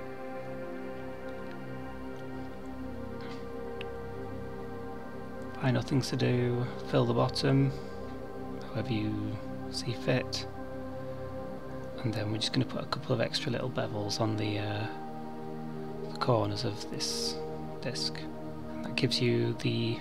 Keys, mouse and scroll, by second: 1.6 middle click, 2.5 Tab, 3.1 Tab, 3.7 2, 4.9 alt+click, 7.2 click, 11.1 click, 11.6 click, 12.6 Tab, 14.3 Tab, 15.1 middle click, 19.0 alt+click, 19.7 middle click.